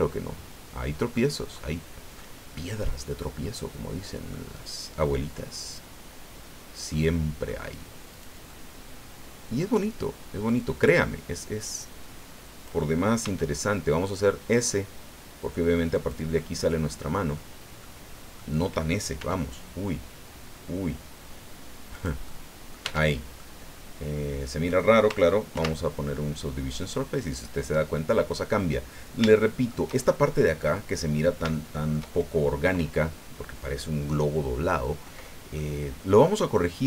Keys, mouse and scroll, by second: 0.7 scroll down 1, 1.1-2.3 drag, 2.4 scroll down 1, 2.8-4.5 middle drag, 5.6 click, 6.9 middle click, 8.1 right click, 8.5-9.8 middle drag, 10.4-12.8 drag, 13.2 s, 15.9 click, 16.3-17.5 middle drag, 17.8 middle click, 19.2 s, 21.9 click, 22.3 middle click, 22.4 click, 22.8 Tab, 23.4-24.9 drag, 25.5 ctrl+2, 26.1-28.7 drag, 28.8 scroll up 2, 29.3 shift+click, 31.0 scroll down 2, 31.5 shift+click, 35.0 scroll down 1, 35.5-36.8 middle drag.